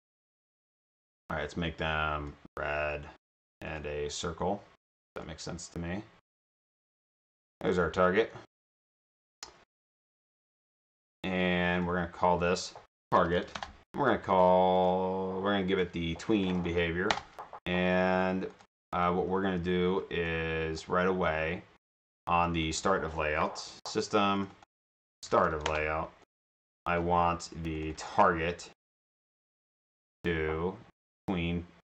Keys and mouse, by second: 1.2-2.4 drag, 6.7-8.2 drag, 10.1 shift+click, 11.4 click, 12.4 click, 12.8-13.9 typing, 14.8 click, 15.7 click, 16.4-17.1 typing, 18.5 drag, 20.4 click, 21.8 click, 24.4 click, 24.6 click, 24.9-26.1 typing, 26.8 click, 27.8 click.